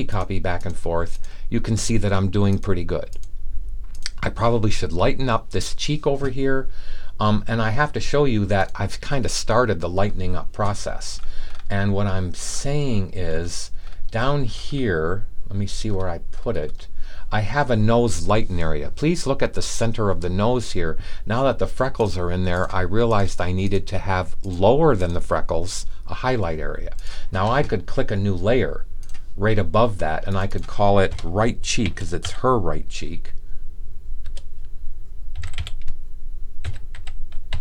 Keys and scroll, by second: 31.5-32.7 typing, 34.2-37.6 typing.